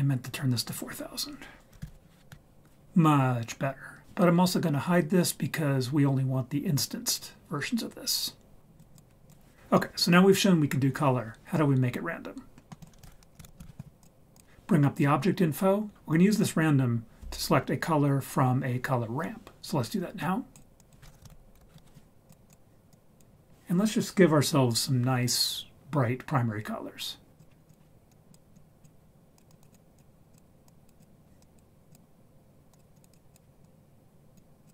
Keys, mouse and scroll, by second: 0.5 click, 1.8 0, 1.9 0, 8.8 click, 9.3 click, 12.5 middle click, 12.8 click, 13.0 shift+a, 20.2 click, 20.8-22.5 drag, 22.9 drag, 27.4 click, 27.5-28.1 scroll up 2, 27.7 click, 29.3 click, 29.5 click, 29.6 click, 29.9 click, 30.3 click, 30.6 drag, 31.0 click, 31.4 click, 31.9 click, 32.7 click, 32.9 click, 33.1 click, 33.3 click, 34.6 click.